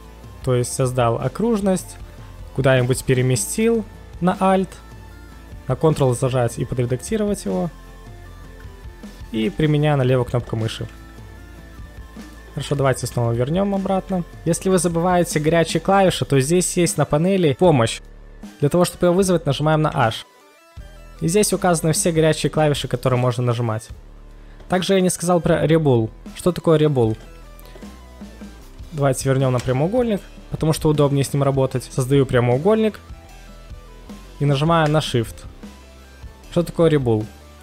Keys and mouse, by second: 9.5 click, 19.9 h, 29.5 space.